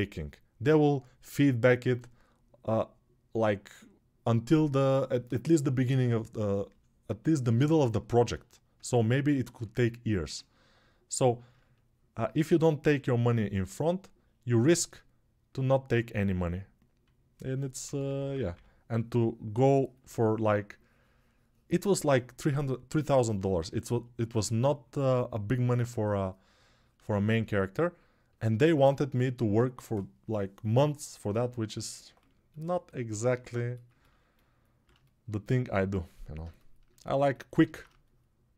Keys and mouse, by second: 13.7-18.3 alt+right drag, 15.7-38.5 drag, 17.6 p.